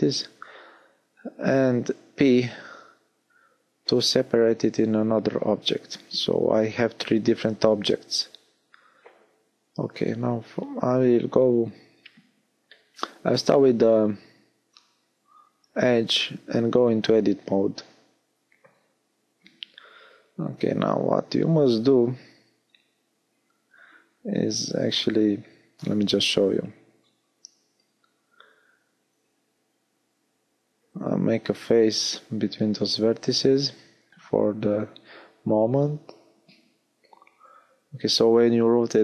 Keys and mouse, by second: 0.5 l, 2.1 p, 4.1 Tab, 8.4 Tab, 20.5-24.5 drag, 24.5 f, 25.5 z, 29.6 f, 32.4 z, 35.5-39.0 middle drag.